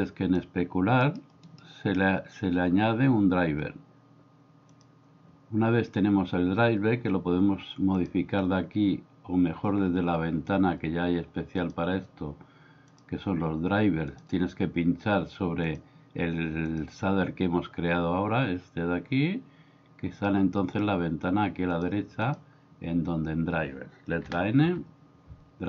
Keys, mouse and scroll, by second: 0.1-1.1 drag, 1.7-8.4 right drag, 11.6-13.0 drag, 14.1 click, 15.6 click, 16.7 click, 22.2 click, 24.3 n, 24.6 n.